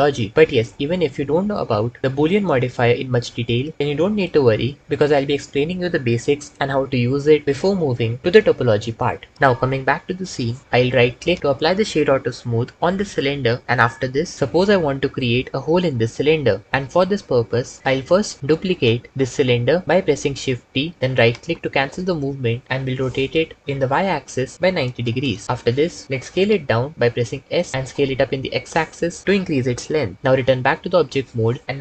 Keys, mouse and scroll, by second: 11.1-12.5 drag, 18.5 shift+d, 23.0 r, 23.7 y, 24.7 KP_9, 24.8 KP_0, 25.3 KP_Enter, 25.8 Tab, 26.1 s, 27.7 s, 30.9 Tab.